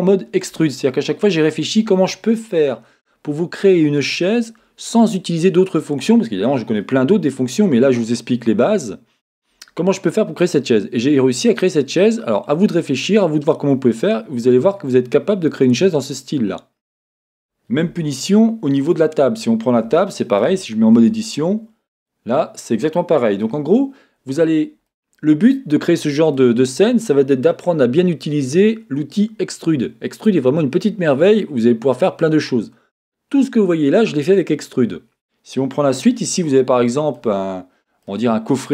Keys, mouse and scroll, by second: 17.9 Tab, 18.8 click, 20.0-38.7 shift+middle drag, 20.4-21.0 scroll up 2, 21.0 Tab, 24.4-24.9 scroll down 2, 37.4-38.0 scroll up 2.